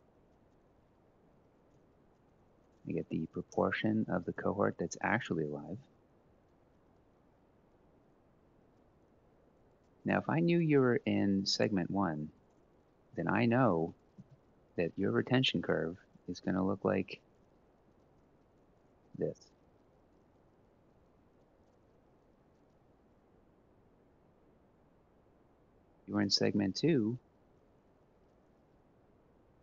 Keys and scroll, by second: 0.3 =, 0.5 Left, 1.1 /, 1.4 Left, 2.0 F4, 3.2 Return, 3.7 Up, 3.9 ctrl+c, 4.1 shift+Down, 4.3 shift+Down, 4.5 shift+Down, 4.7 shift+Down, 4.8 shift+Down, 5.0 shift+Down, 5.2 shift+Down, 5.5 ctrl+v, 13.3-14.5 typing, 16.5 F4, 17.0-19.0 typing, 21.3 Return, 21.8 Up, 22.1 ctrl+c, 22.4-23.6 shift+Down, 22.7 shift+Down, 22.9 shift+Down, 23.9 ctrl+v, 27.1-28.6 typing.